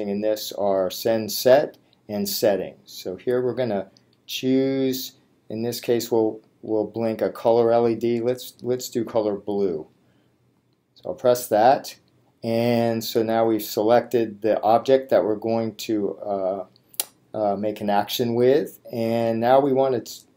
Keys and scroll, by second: 4.2 Down, 6.7 Down, 7.4 Down, 8.2 Down, 10.6 Return.